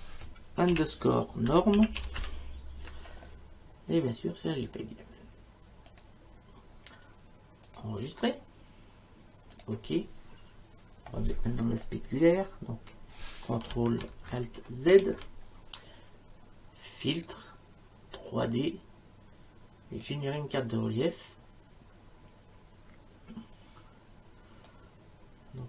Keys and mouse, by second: 0.7-2.7 typing, 4.7 click, 5.9 click, 7.7 click, 9.6 click, 14.9 ctrl+alt+z, 17.2 click, 20.1 click, 24.7 click.